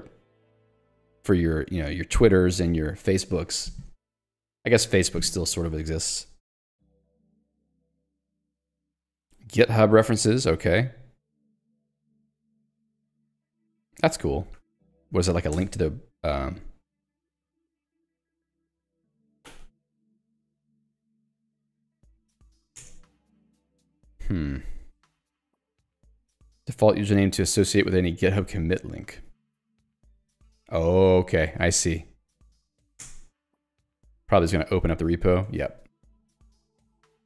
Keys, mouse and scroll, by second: 2.6 Escape, 5.8 j, 8.0 k, 9.2 j, 14.0 k, 14.6 l, 15.7 alt+Return, 20.2-21.6 typing, 23.0 Return, 25.8 ctrl+d, 28.4 q, 29.1 Escape, 29.4 j, 30.0 l, 31.8 shift+v, 32.3 Escape, 33.1 alt+Return, 35.5 alt+Return, 35.9 Escape, 36.4 j.